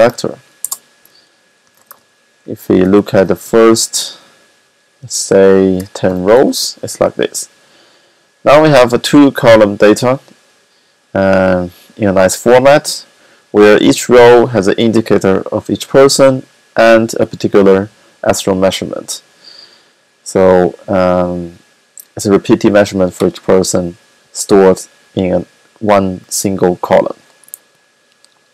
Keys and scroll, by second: 0.0-6.3 typing.